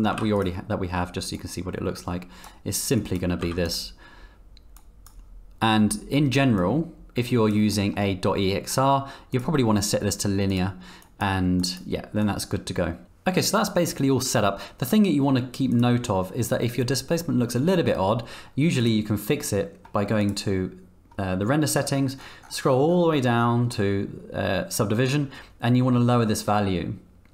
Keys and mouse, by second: 0.1 z, 1.4-2.4 drag, 3.0 drag, 3.4 z, 4.8-5.1 drag, 6.6-7.5 drag, 7.7 click, 9.3-10.3 drag, 11.0 click, 11.6 drag, 12.3-13.0 drag, 15.7 click, 20.2 click.